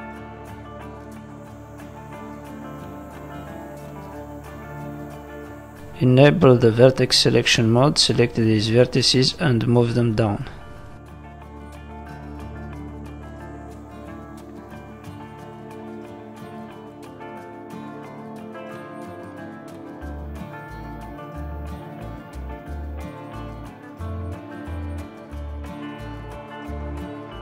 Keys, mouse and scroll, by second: 0.6 middle click, 2.6 shift+middle click, 2.9 scroll up 1, 3.1 middle click, 3.8 shift+middle click, 4.2 scroll up 1, 4.3 middle click, 6.1 click, 6.4 middle click, 7.2 click, 7.5 middle click, 8.5 shift+click, 9.5 click, 10.7 middle click, 11.5 shift+click, 12.4 shift+click, 12.6 middle click, 13.7 click, 14.9 middle click, 16.9 middle click, 19.3 click, 20.3 shift+middle click, 20.3 scroll down 3, 20.6-21.5 scroll down 3, 20.9 shift+middle click, 21.5 shift+middle click, 21.7-22.3 scroll up 7, 22.3 middle click, 22.7 shift+middle click, 23.8 click, 24.1 middle click, 24.9 shift+click, 25.7 click.